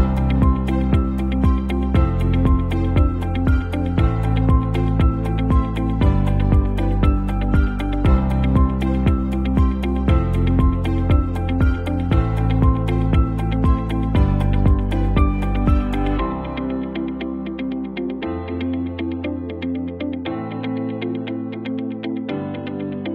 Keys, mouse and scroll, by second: 0.1 alt+scroll down 1, 3.5-4.1 alt+scroll up 3, 4.2 space, 4.3-5.0 click, 4.6 space, 5.3 t, 5.8-11.3 drag, 14.9-18.3 typing, 19.2 click, 19.7 ctrl+t, 20.6-23.1 drag.